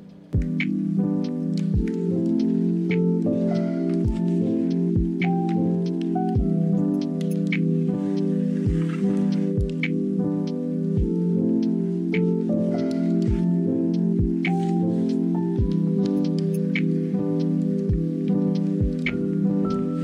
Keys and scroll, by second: 2.0 space, 2.9 space, 5.7 z, 6.1 space, 7.8 space, 8.5 space, 9.5 space, 13.4 ctrl+z, 14.1 space, 14.5 space.